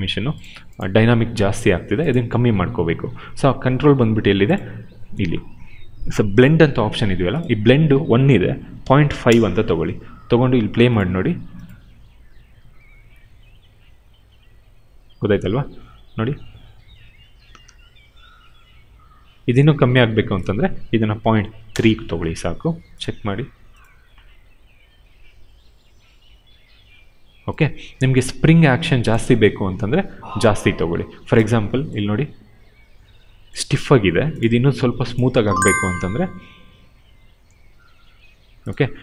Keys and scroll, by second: 8.3-9.2 typing, 21.2 ., 21.7 Return.